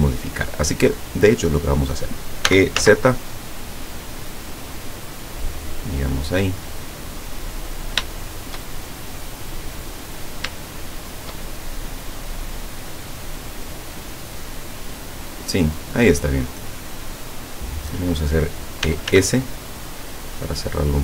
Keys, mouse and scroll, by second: 2.5 e, 2.8 z, 6.2 click, 6.7 middle click, 7.8-8.2 scroll down 1, 8.2 shift+middle click, 9.4 middle click, 10.1-10.4 scroll up 1, 10.6 shift+middle click, 11.6 shift+middle click, 12.5-13.0 shift+scroll up 3, 14.0 scroll up 2, 15.4 middle click, 16.4 scroll down 2, 18.9 e, 19.1 s.